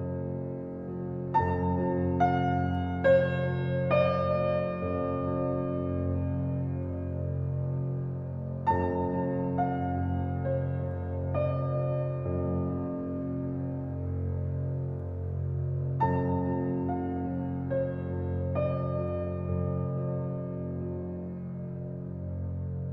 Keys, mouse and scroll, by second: 0.0 Tab, 0.4-1.9 middle drag, 1.9 click, 2.3-3.7 middle drag, 3.7-5.6 drag, 6.0-7.9 drag, 8.6-10.6 drag, 11.4 click, 12.2 click, 12.6 click, 14.1-15.9 drag, 16.3-18.1 middle drag, 18.1-21.6 drag, 22.0-22.9 drag.